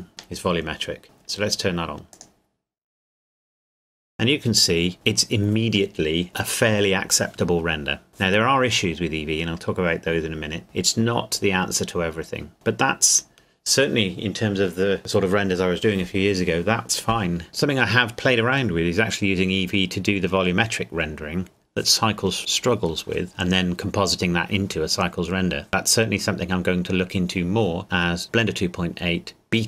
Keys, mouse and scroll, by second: 2.1 click.